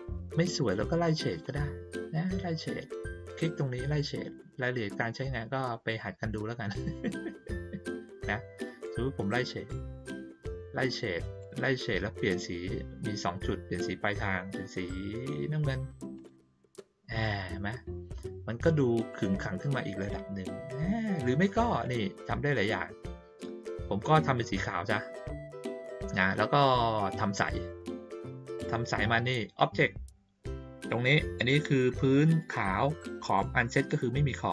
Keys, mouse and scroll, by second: 1.4 click, 4.9 click, 16.1 click, 19.1 click, 21.8 click, 24.3 click.